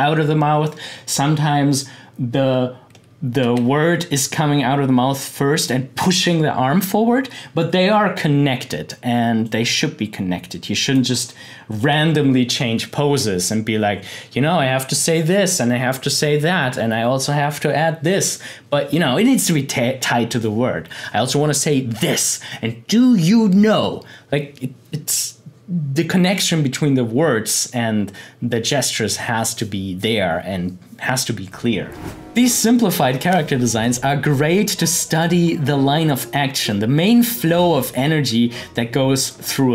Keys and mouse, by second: 3.4 Left, 9.4-11.7 drag.